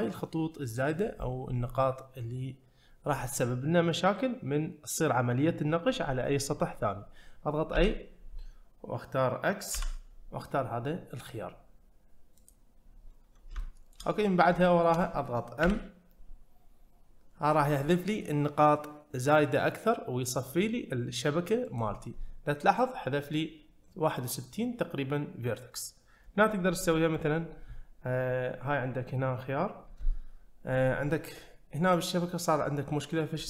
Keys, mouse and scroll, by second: 13.6 shift+middle click, 14.2-14.5 scroll up 1, 14.6 shift+middle click, 14.9 shift+click, 15.6 m, 27.2 click.